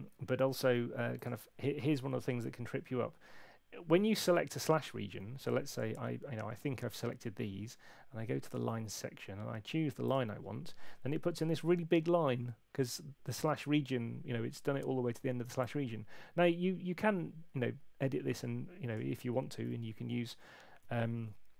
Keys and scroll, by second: 19.7 alt+shift+Left, 20.3 alt+shift+Left.